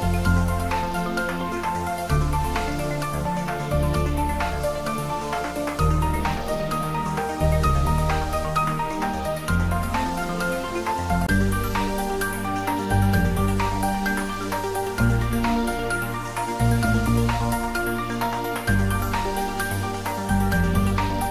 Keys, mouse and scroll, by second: 0.2 click, 2.3-3.2 scroll down 1, 3.2 middle click, 4.2 scroll down 1, 4.6-6.3 middle drag, 6.3 scroll down 1, 17.5 scroll down 1, 19.5 middle click, 19.6-21.3 middle drag.